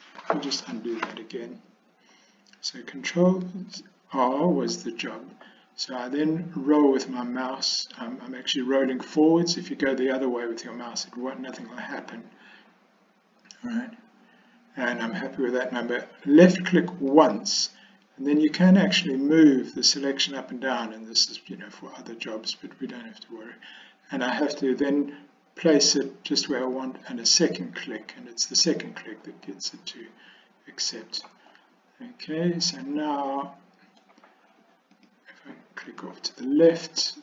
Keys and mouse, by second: 0.7 ctrl+z, 3.6 ctrl+r, 29.5-31.3 middle drag, 33.5 middle click, 35.1 click.